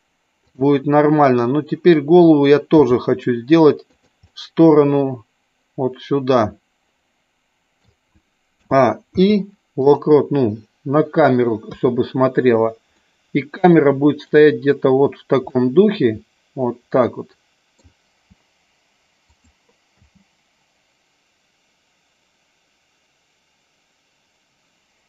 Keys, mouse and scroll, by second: 0.3 click, 1.2 middle click, 2.7 r, 3.8 click, 4.2-7.7 middle drag, 8.5 a, 8.9 i, 11.6 KP_3, 12.8-14.3 middle drag, 15.5-17.8 middle drag, 19.2 click, 19.8 space.